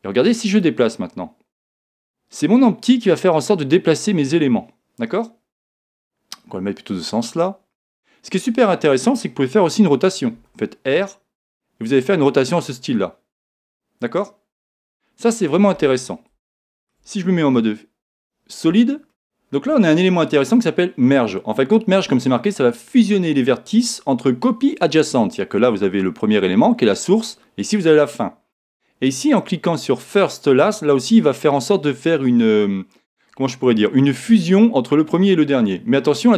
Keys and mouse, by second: 0.6 click, 10.4 r, 14.8 click, 16.6-18.4 middle drag, 17.5 z, 30.6 click.